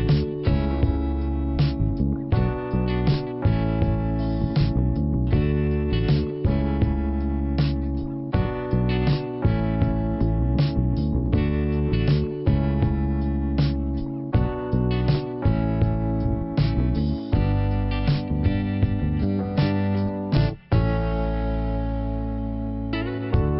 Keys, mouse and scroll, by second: 0.5 click, 4.0 click, 4.1 click, 9.2 click, 10.8 click, 12.4 click, 12.4 click, 13.3 click, 13.4 click, 14.4 click, 14.5 click, 15.8 click, 18.2 click, 18.2 click, 20.0 click.